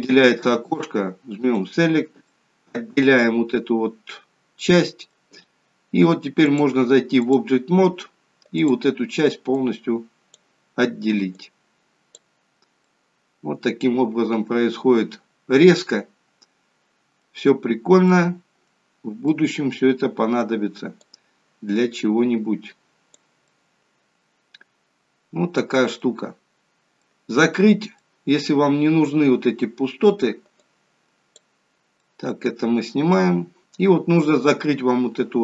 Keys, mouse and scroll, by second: 2.3 middle click, 6.6 click, 8.7 click, 11.5 click, 12.9 middle click, 17.7-18.1 scroll up 2, 18.1 middle click, 18.9-19.5 scroll down 3, 19.3 middle click, 21.1 click, 23.5 middle click, 26.5-27.4 scroll up 1, 27.4 middle click, 28.0 middle click, 30.6 click, 32.1 middle click, 33.4 scroll up 2.